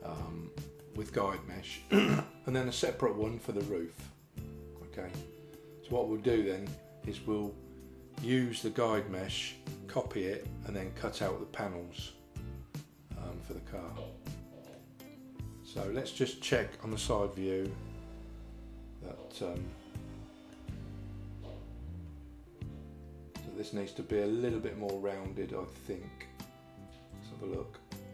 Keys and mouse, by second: 0.8 middle click, 5.6 middle click, 13.8 middle click, 17.1 KP_3, 20.0 shift+middle click, 27.0 Tab.